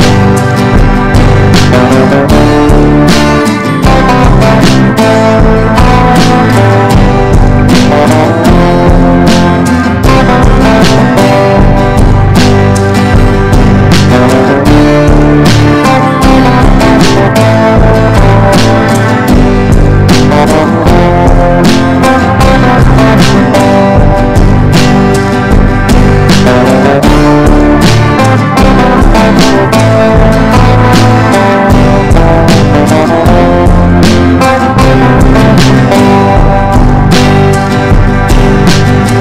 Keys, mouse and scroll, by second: 1.7 right click, 2.2 click, 4.2-19.9 drag, 22.8 right click, 23.4 click, 27.1-34.4 drag, 35.7-39.2 drag.